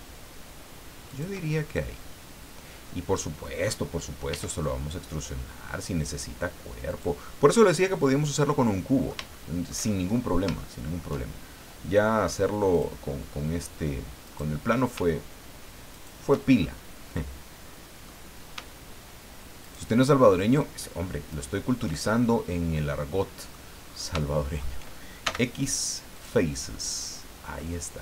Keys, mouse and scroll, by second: 1.1 shift+click, 1.7-3.6 shift+middle drag, 4.3 e, 6.9 click, 7.9-9.3 middle drag, 10.1-10.4 shift+scroll up 3, 10.6 shift+middle click, 12.7 click, 14.2 right click, 15.9 shift+right click, 16.6-18.2 shift+middle drag, 19.6 shift+right click, 21.3 shift+right click, 22.0 shift+scroll down 2, 22.4-23.7 middle drag, 23.8-24.2 scroll up 3, 24.3 shift+middle click, 25.2 shift+x, 26.1 click, 27.0-27.3 scroll down 1, 27.6 middle click.